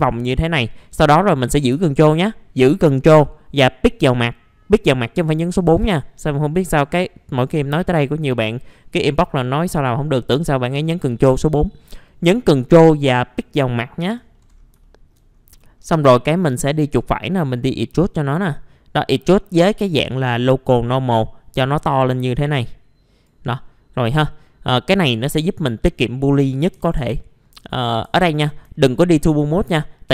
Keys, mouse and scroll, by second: 10.7 ctrl+click, 14.3 middle click, 14.8 alt+middle click, 15.3 scroll up 1, 15.4 scroll down 1, 15.6 scroll up 1, 16.4 right click, 17.9 click, 21.7 right click, 22.1 click, 23.5 middle click, 23.6 scroll down 1, 24.6-25.1 scroll down 1, 25.1 click, 26.8 1, 28.0 F4, 28.3-28.6 scroll down 1, 28.7 alt+middle click, 29.9-30.1 scroll up 1.